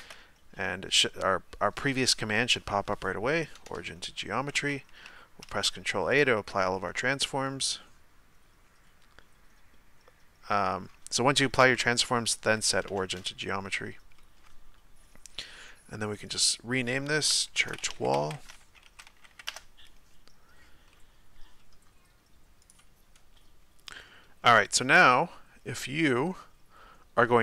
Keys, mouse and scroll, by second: 6.2 ctrl+a, 6.9-10.6 middle drag, 12.9 space, 14.2-16.2 middle drag, 16.2 click, 19.5 l, 23.9-27.4 middle drag.